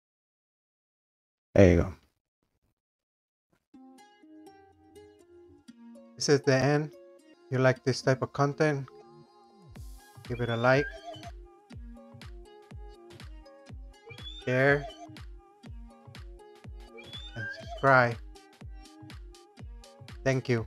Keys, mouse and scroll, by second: 0.4-2.1 drag, 2.4 click.